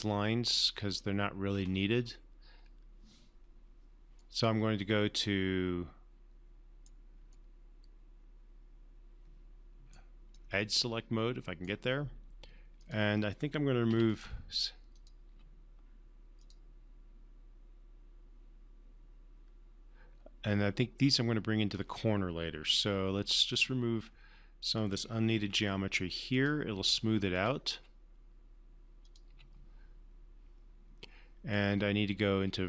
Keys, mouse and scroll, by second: 1.9-2.3 alt+scroll up 1, 2.3-3.8 alt+scroll down 1, 4.5-7.4 alt+right drag, 7.7-10.5 alt+right drag, 10.7-12.3 alt+right drag, 13.1 alt+click, 14.3 alt+Delete, 15.3 alt+click, 15.7 alt+Delete, 16.9 alt+click, 23.0 alt+click, 23.2-24.1 alt+drag, 25.7 Delete, 26.7 click, 27.1 Delete, 27.7 click, 28.1 Delete, 29.4 click, 29.7 Delete, 31.8-32.6 right drag.